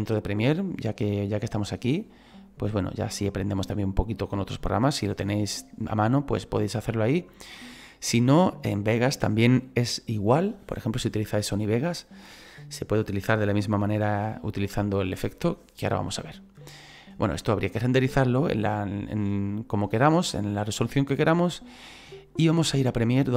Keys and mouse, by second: 18.1 click.